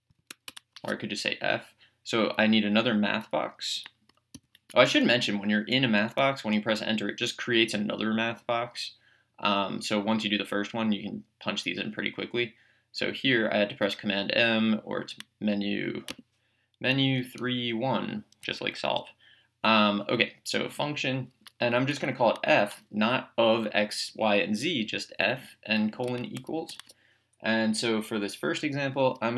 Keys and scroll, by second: 0.0-0.4 typing, 4.7 m, 5.7 Up, 8.7 Down, 16.1 Menu, 17.2 3, 18.4 Escape, 21.8 f, 26.7 =.